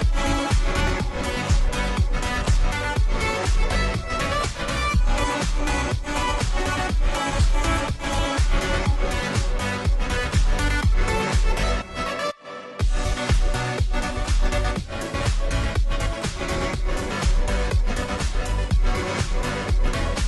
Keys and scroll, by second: 1.7-2.5 typing, 6.0 alt+BackSpace, 19.2-20.1 typing, 20.1 Return.